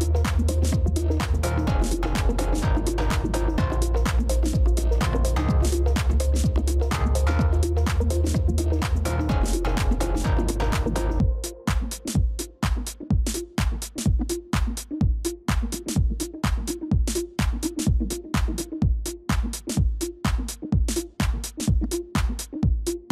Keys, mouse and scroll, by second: 13.9-15.1 typing.